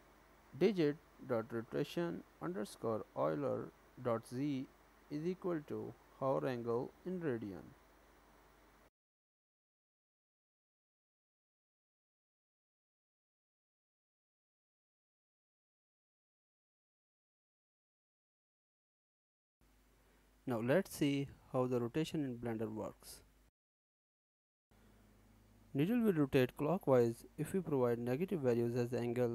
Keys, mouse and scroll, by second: 19.6 r, 20.6 n, 22.0 click, 23.1 click.